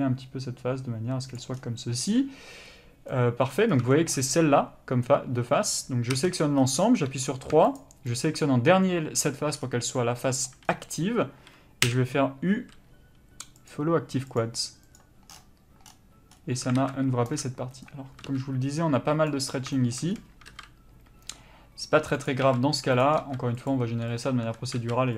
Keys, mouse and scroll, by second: 3.1 middle click, 3.7 scroll up 1, 3.9 shift+middle click, 6.1 a, 6.6 scroll up 1, 7.1 3, 7.8 shift+click, 9.6-10.2 scroll down 1, 10.2 middle click, 10.7-12.1 scroll up 1, 15.0 u, 16.8 alt+a, 17.8 b, 18.3 s, 23.7 click, 23.8 g, 24.8 s.